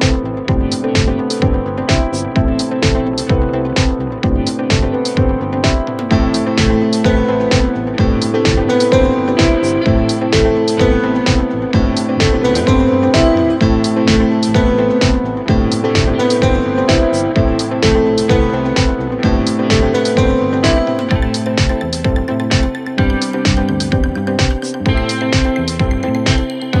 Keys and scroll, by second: 0.9-2.7 typing, 5.1-6.5 typing, 7.7-8.4 typing.